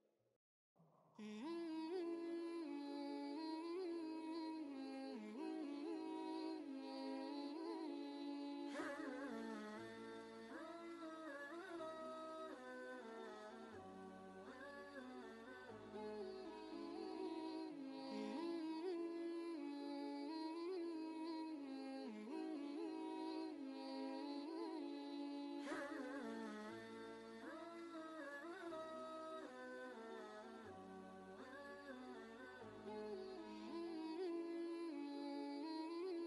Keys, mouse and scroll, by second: 1.1 ctrl+space, 1.1 ctrl+click, 1.6 ctrl+space, 1.9-3.7 drag, 3.7-8.3 shift+drag, 8.3 Left, 9.9 shift+Right, 10.4 Left, 14.7 Left, 14.7 right click, 15.7 click, 19.9 ctrl+space, 20.1 ctrl+click, 20.4 ctrl+space, 21.9 click, 23.8 ctrl+space, 23.9 ctrl+click, 24.5 space, 24.7 click, 25.9 space, 26.0 ctrl+click, 26.8 space, 26.9 click, 27.4 ctrl+space, 27.6 ctrl+click, 28.8 ctrl+space, 34.2 ctrl+space, 34.3 click.